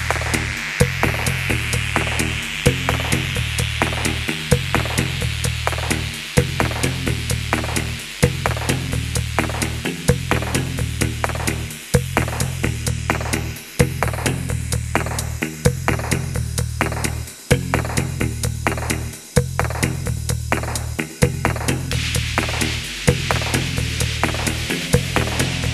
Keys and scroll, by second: 0.5-4.5 typing, 1.7 Escape, 3.0 Return, 4.5 alt+h, 7.1 e, 7.6 Tab, 7.9 shift+s, 9.7 Tab, 10.2-13.2 typing, 11.0 Num_Lock, 11.2 Escape, 11.7 Escape, 13.7 Escape, 13.7 Escape, 14.2-20.0 typing, 16.3 Escape, 20.1 Return, 21.8 Tab, 22.7 Tab, 23.2-24.7 typing, 24.1 Num_Lock, 24.3 Return.